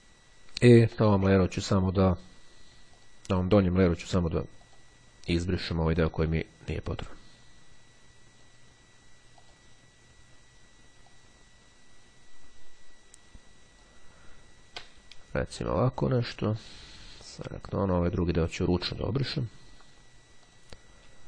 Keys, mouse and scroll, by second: 0.3-1.1 ctrl+scroll down 2, 3.0 click, 4.7 click, 7.1-9.0 drag, 9.5 click, 10.9-14.4 drag, 14.7 Delete, 16.6 click, 17.7 click, 19.1 click, 20.5 click.